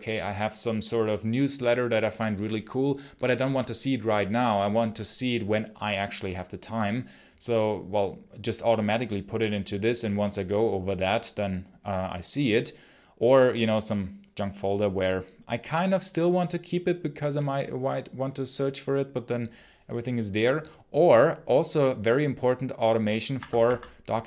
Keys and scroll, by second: 23.2 Escape, 23.5 Escape.